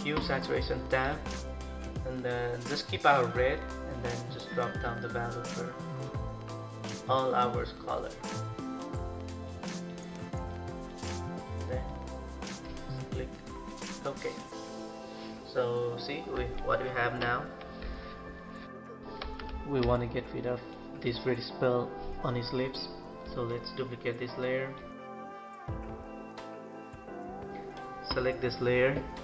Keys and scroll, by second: 17.0 ctrl+=.